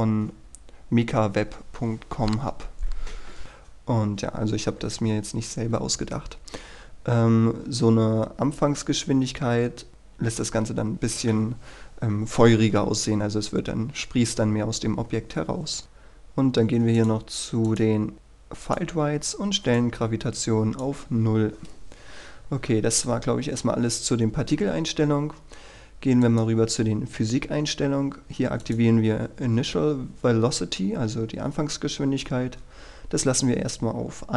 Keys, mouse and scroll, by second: 3.4 click, 6.1-6.7 scroll up 1, 6.7-8.6 scroll down 1, 15.8 click, 16.2-17.1 scroll down 1, 17.1 click, 18.1-18.8 scroll down 1, 18.8 click, 19.1-19.9 scroll down 1, 19.9-21.5 drag, 21.8-22.6 scroll up 1, 26.4-27.5 drag.